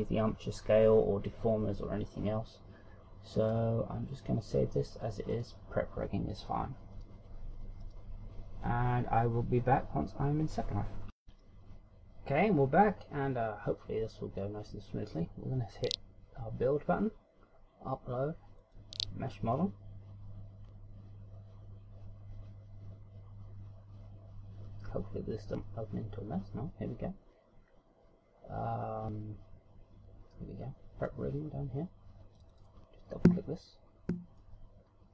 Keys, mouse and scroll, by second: 9.2 click.